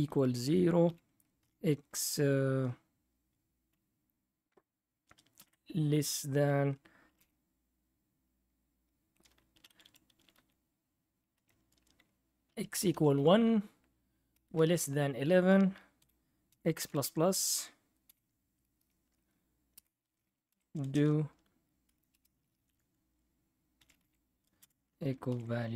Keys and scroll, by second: 0.0-1.4 typing, 5.3 <, 6.8-7.6 typing, 9.5 Left, 9.6 Left, 9.8 Left, 10.1 Left, 10.3 Left, 11.3 BackSpace, 12.5-14.6 typing, 16.0-16.8 typing, 18.1 ), 18.8 ), 19.8 Return, 20.0-20.8 typing, 21.8-25.7 typing.